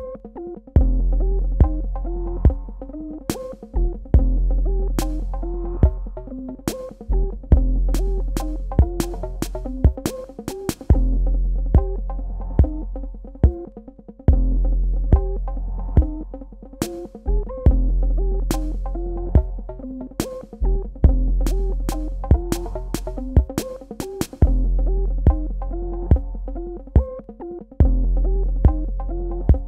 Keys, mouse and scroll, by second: 0.4 Tab, 2.1 click, 5.8 click, 11.5 Tab, 12.7 click, 28.2 click.